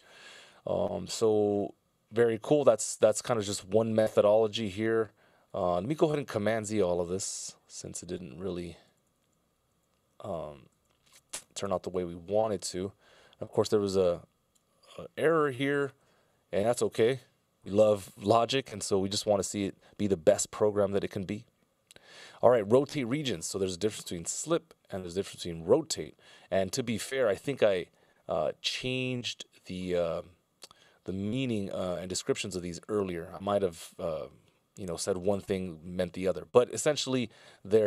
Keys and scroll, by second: 6.4 super+z, 6.9 super+z, 9.1 super+z, 9.7 super+z, 11.0 super+z, 16.1 F16, 17.6 super+s.